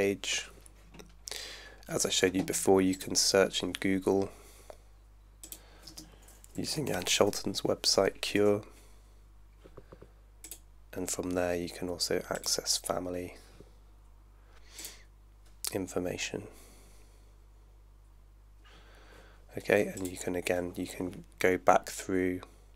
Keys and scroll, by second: 5.9-7.5 typing, 8.4 Return.